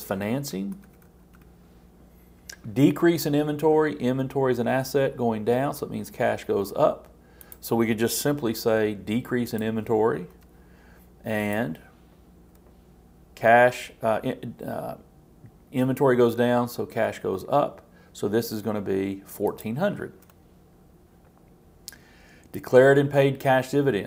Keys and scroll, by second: 8.5 super+c, 10.3 super+v.